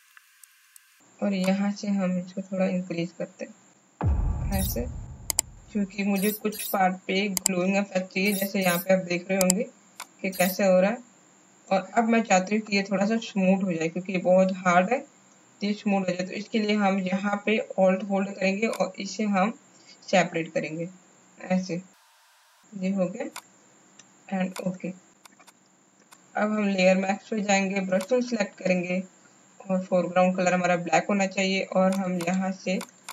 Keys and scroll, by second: 25.4 space, 27.5 b, 28.9 alt+x.